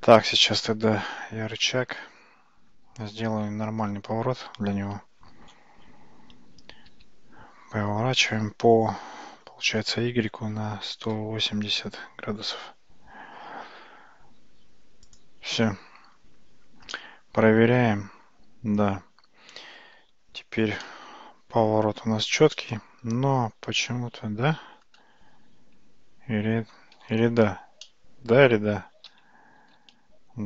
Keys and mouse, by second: 0.4 ctrl+z, 0.8 ctrl+z, 3.3 `, 4.0 `, 6.9 r, 17.0-17.7 middle drag, 20.9-22.5 shift+middle drag, 22.6-24.9 middle drag, 27.9-28.4 shift+middle drag, 29.8 alt+z.